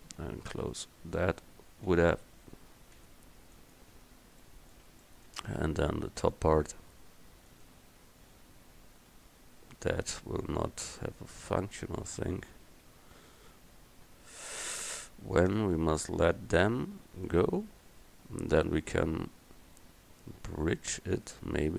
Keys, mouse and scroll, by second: 0.8-2.0 right drag, 2.0 g, 4.0 f, 16.5 right click, 16.5 middle click, 16.6 right click, 17.9 middle click, 18.1 click, 18.3 click.